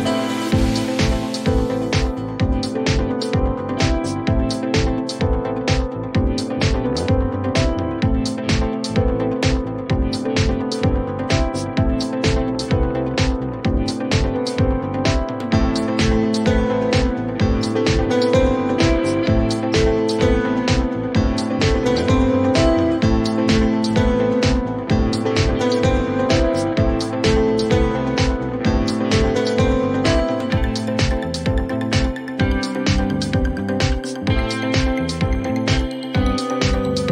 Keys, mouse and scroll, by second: 0.3 Return, 2.5-4.7 drag, 2.7-3.6 typing, 3.6 Return, 6.4-8.8 drag, 11.6-13.4 scroll, 13.4 click, 14.4 click, 17.0-19.3 scroll, 19.3 click, 20.5 click, 21.9 scroll, 22.7 click, 23.4-25.6 drag, 26.7-28.2 drag, 29.7-32.1 drag, 30.0-30.9 typing, 33.9-34.9 drag, 34.6-36.8 typing.